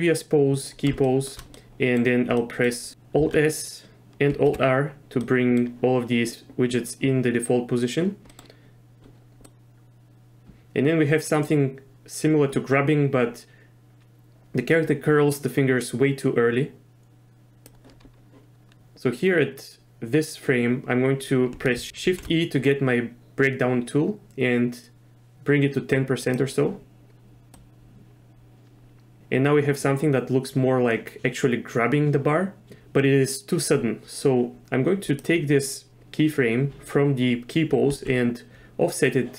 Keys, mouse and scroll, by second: 1.0 shift+middle drag, 1.6 click, 2.4 click, 3.3 alt+s, 4.5 alt+r, 5.2 middle click, 8.3 middle click, 9.5-17.7 drag, 21.9 shift+e, 22.1 shift+e, 27.6-33.7 drag, 35.1 click, 37.9 g.